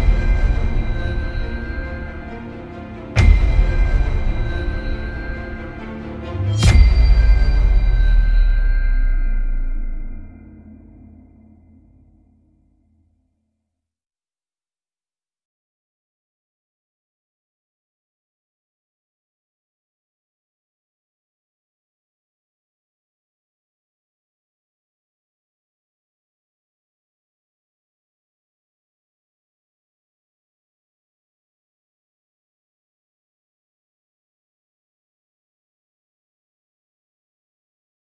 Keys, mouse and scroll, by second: 1.3-2.6 scroll up 1, 2.6 Escape, 3.2 `, 3.5 scroll down 1, 3.8 ctrl+r, 5.6 right click, 5.8 g, 7.5 click, 7.9 ctrl+r, 8.8 right click, 8.9 s, 9.6 KP_Enter, 9.7 g, 12.1 click, 12.3-16.1 shift+middle drag, 13.0 ctrl+r, 16.1 click, 16.4 ctrl+r, 17.8 click, 18.0 scroll up 1, 18.3 shift+middle click, 18.6 scroll up 1, 18.9 click, 19.1 alt+shift+click, 20.1 g, 21.8 click, 21.9 scroll down 1, 22.1-28.7 shift+middle drag, 22.8 ctrl+r, 26.4 Escape, 26.5 scroll down 1, 26.6 Tab, 27.6-28.2 scroll up 2, 28.2-28.7 scroll up 1, 28.7 shift+click, 29.7 ctrl+j, 31.7-32.1 middle drag, 32.1 click, 32.4 Tab, 32.7 scroll up 1, 33.0-33.6 shift+middle drag, 33.6 click, 33.9 alt+shift+click, 34.6 click, 35.6 alt+shift+click, 36.1 click, 37.1 middle click, 37.4 alt+shift+click, 37.8 middle click.